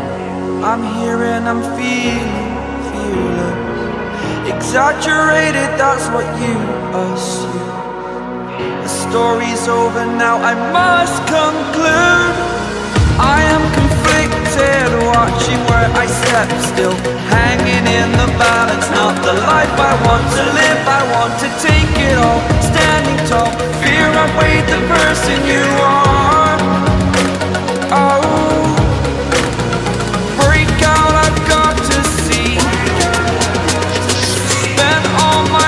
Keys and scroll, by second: 0.0-0.4 typing, 1.1 ctrl+a, 10.9 ctrl+a, 21.7 Escape, 23.3 Escape, 24.2 ctrl+z, 24.9 space, 25.7 v, 28.4 ctrl+t.